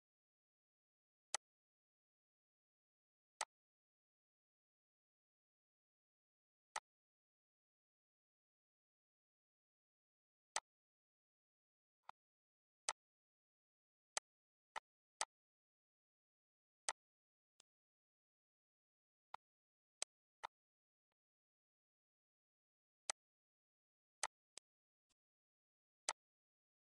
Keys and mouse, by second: 0.9 click, 3.2 click, 6.5 click, 10.3 click, 11.8 click, 12.6 click, 13.9 click, 16.6 click, 17.4 click, 19.1 click, 19.7 click, 20.2 shift+click, 20.9 click, 22.8 click, 24.0 click, 24.3 shift+click, 25.9 click.